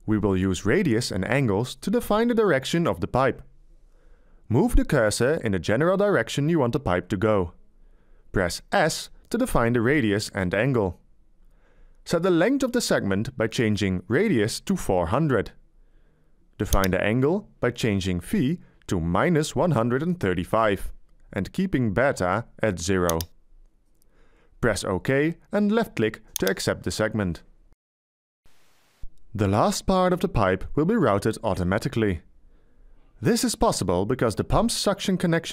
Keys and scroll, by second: 10.1 s, 14.4-15.6 typing, 18.7 -, 19.3 1, 19.7 3, 20.3 5.